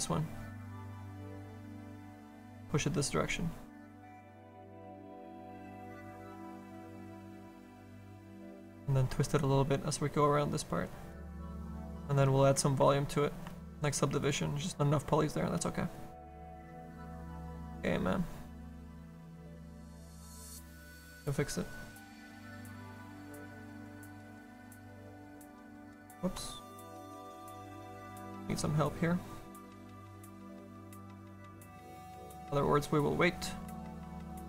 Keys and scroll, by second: 0.7 s, 26.3 ctrl+z.